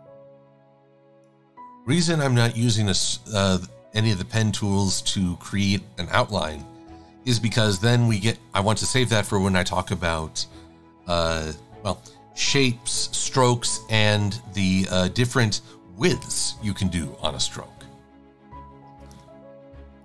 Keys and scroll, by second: 3.2 shift+super+a, 6.9 a, 13.2 super+-, 18.6 a.